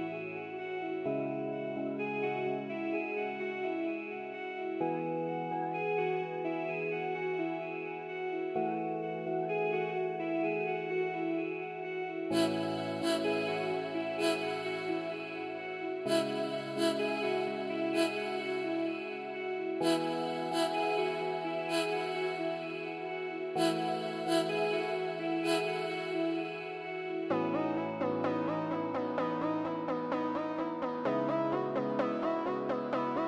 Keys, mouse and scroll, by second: 0.2 scroll up 1, 0.5-2.3 scroll down 1, 2.6 scroll down 1, 3.0 scroll up 1, 3.4 scroll down 1, 13.5 scroll up 1, 14.1 scroll down 1, 15.6 scroll up 1, 17.0-18.9 scroll down 1.